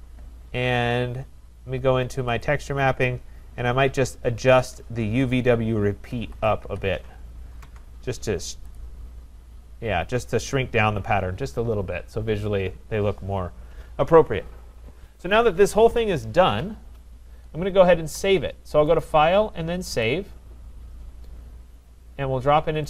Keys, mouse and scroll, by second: 2.4 click, 4.4 click, 4.8 click, 5.3 click, 5.9-7.1 typing, 7.6 Tab, 9.0 click, 16.3-17.3 scroll, 17.3-19.0 scroll, 19.0 click, 20.1 click.